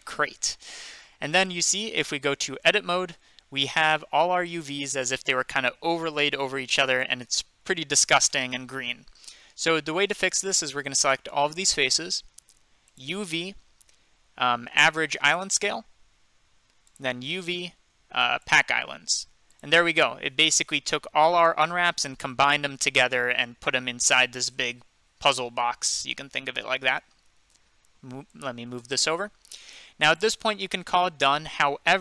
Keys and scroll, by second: 2.4 Tab, 10.7 a.